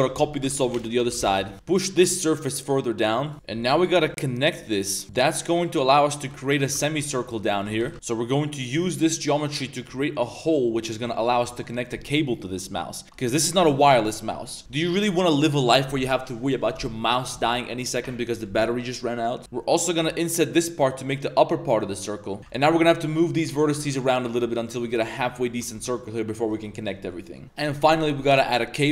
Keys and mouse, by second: 1.5 shift+n, 1.7 shift+s, 1.7 3, 1.7 2, 3.3 Tab, 3.3 ctrl+r, 3.3 2, 3.5 ctrl+r, 3.9 2, 4.1 click, 4.7 shift+click, 5.6 click, 6.8 alt+drag, 7.5 alt+shift+click, 7.8 g, 7.9 i, 8.8 x, 10.2 Tab, 10.6 click, 11.5 middle click, 11.7 middle click, 12.3 middle click, 12.4 Tab, 12.6 shift+middle drag, 17.5 middle click, 18.3 middle drag, 19.4 middle click, 19.4 z, 19.4 i, 19.9 i, 22.4 Tab, 22.4 ctrl+z, 22.4 a, 22.5 middle click, 22.9 Tab, 23.1 click, 23.3 Tab, 23.9 Tab, 24.2 click, 24.8 shift+click, 25.1 s, 25.8 Tab, 25.9 middle click, 26.5 shift+middle click, 26.7 click, 26.9 Tab, 27.0 middle click, 27.2 shift+middle click.